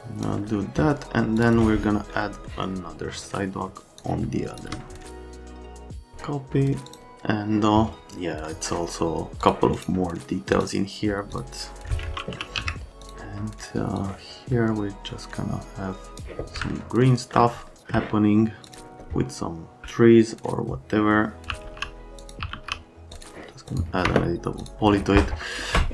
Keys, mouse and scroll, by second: 1.4 click, 2.5 middle click, 3.2 right click, 4.0 shift+click, 5.2 click, 5.6 click, 5.8 middle click, 6.9 click, 9.4 click, 9.8 scroll up 1, 10.5 click, 11.3 click, 12.3 r, 12.6 z, 13.0 click, 14.0 click, 16.7 alt+middle click, 17.8 alt+middle click, 18.6 click, 21.2-23.0 typing, 22.2 click, 23.1 click, 23.7 click, 24.0 F3, 24.6 click.